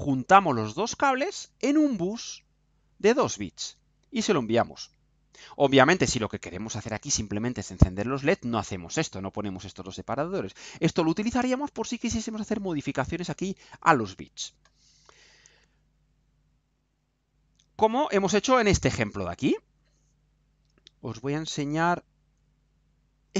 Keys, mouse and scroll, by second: 23.2 click.